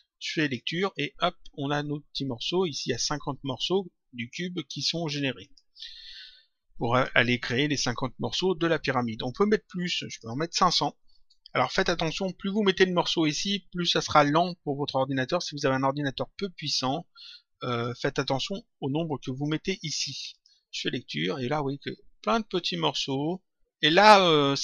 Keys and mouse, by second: 0.3 click, 5.4 click, 6.8 click, 10.0 click, 11.4 click, 16.5 click, 20.2 click.